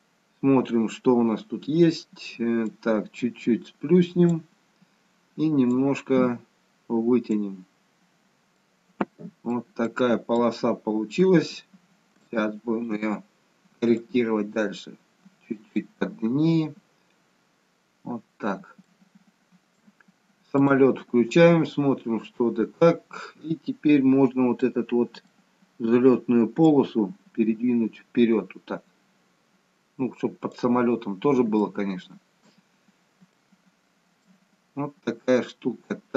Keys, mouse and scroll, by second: 0.2-1.0 scroll up 2, 1.0-1.7 scroll down 2, 2.6 click, 7.5-8.5 scroll down 3, 8.5 middle click, 8.5 scroll down 4, 9.8 middle click, 9.8-11.0 scroll up 1, 11.0-11.7 scroll up 1, 11.7-12.8 scroll up 3, 12.1 shift+middle click, 14.0 click, 15.9-16.7 scroll down 2, 16.7-17.8 scroll up 2, 17.8-18.6 scroll down 1, 18.8 shift+middle click, 20.7 click, 22.2-23.5 scroll down 1, 23.5-24.5 scroll down 1, 24.5 middle click, 26.6 click, 31.0-31.5 scroll down 2, 31.8 shift+middle click, 32.7-33.2 scroll up 2, 33.3 shift+middle click.